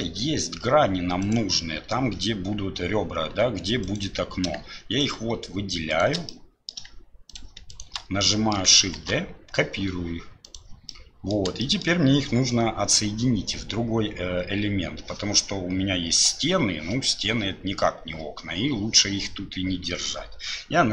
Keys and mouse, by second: 6.3 click, 7.3 shift+click, 7.7 shift+click, 8.2 click, 9.0 shift+d, 11.0 middle click, 11.6 shift+middle click.